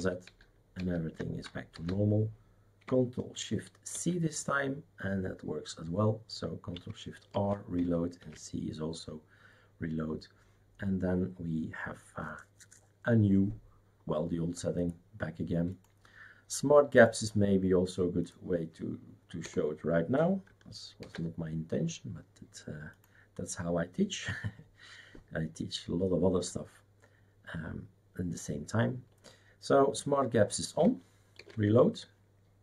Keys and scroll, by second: 0.1 ctrl+z, 0.2 ctrl+z, 0.7 ctrl+z, 1.7 ctrl+s, 3.9 shift+super+c, 8.2 shift+super+c, 19.4 BackSpace, 21.0 ctrl+s.